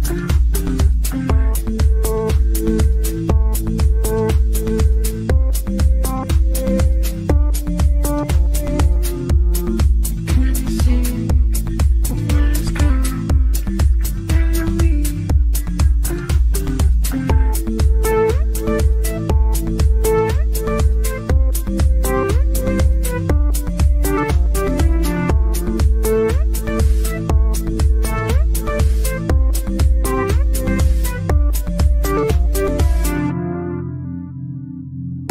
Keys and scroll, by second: 28.2 e.